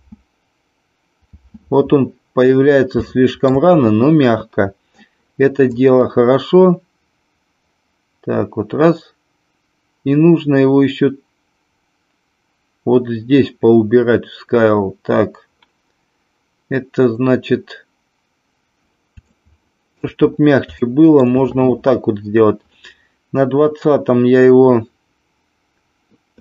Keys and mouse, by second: 1.4 space, 3.1-3.6 shift+middle drag, 5.7-18.8 drag, 19.2 shift+middle click, 20.9 shift+middle click.